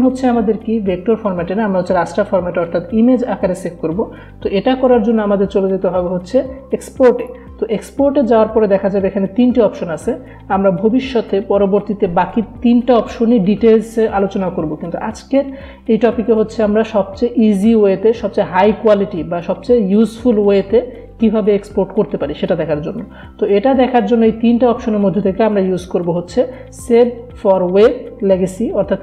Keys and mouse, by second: 7.3 click.